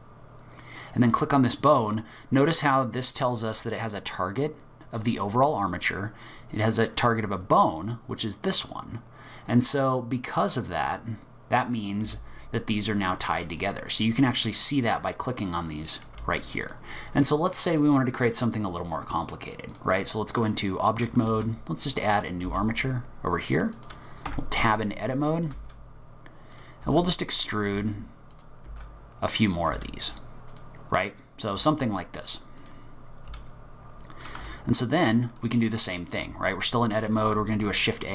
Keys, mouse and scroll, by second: 1.1 click, 11.7 click, 12.0 g, 14.0 click, 15.6 click, 16.0 g, 17.7 click, 20.4 scroll down 3, 20.6-21.2 scroll up 2, 21.3 shift+a, 22.5 g, 24.3 Tab, 25.5 e, 26.8 e, 27.7 e, 28.7 e, 29.7 e, 31.6 space, 33.5 scroll down 1, 33.8-34.3 scroll up 1, 34.5 shift+middle click, 37.3 shift+a.